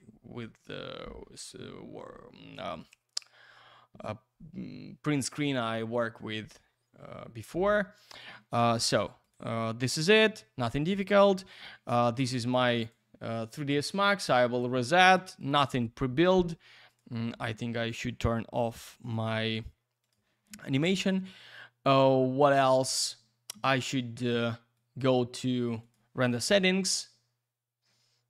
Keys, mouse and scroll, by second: 6.5 click, 8.7 click, 11.0 click, 12.1 middle click, 12.3 click, 12.4 double click, 12.5 click, 12.7 click, 12.7 double click, 13.9 click, 15.4 click, 16.9 click, 19.0 click, 20.0 click, 24.7 click, 25.8 click, 26.4 F10.